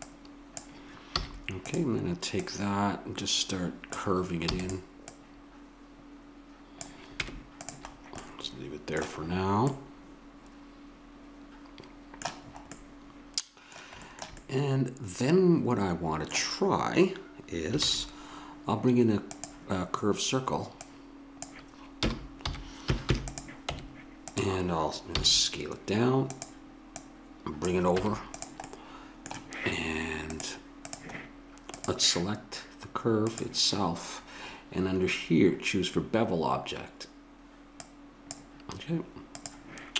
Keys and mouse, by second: 1.2 a, 3.8 click, 4.4 e, 5.0-6.9 drag, 7.2 Tab, 8.0-9.2 middle drag, 12.8-14.8 middle drag, 17.8 shift+a, 20.8-22.4 drag, 22.0 r, 23.6 Tab, 25.1 s, 27.1 click, 28.0 Tab, 28.6 middle drag, 30.3-34.9 drag, 35.1-37.7 middle drag, 37.7-39.9 drag.